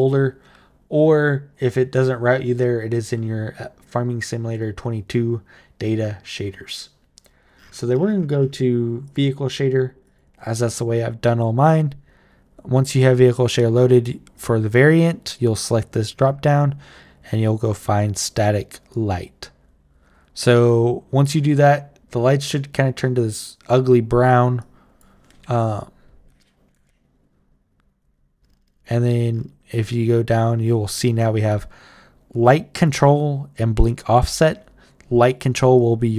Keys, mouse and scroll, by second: 8.8 click, 9.8 click, 14.1 click, 15.0 click, 18.7 click, 24.4 click, 30.7 click, 32.2 click, 33.3 click, 35.0 click, 35.5 click.